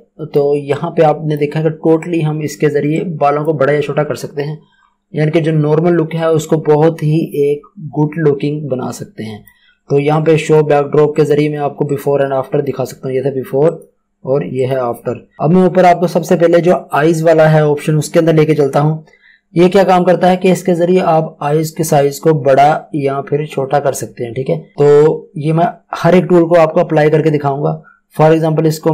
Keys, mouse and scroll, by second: 4.7 scroll down 1, 6.1 click.